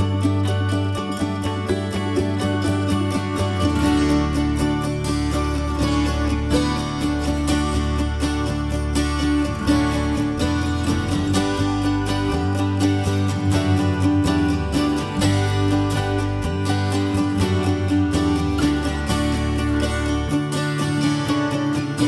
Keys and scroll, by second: 9.6 ctrl+g, 21.7 ctrl+s.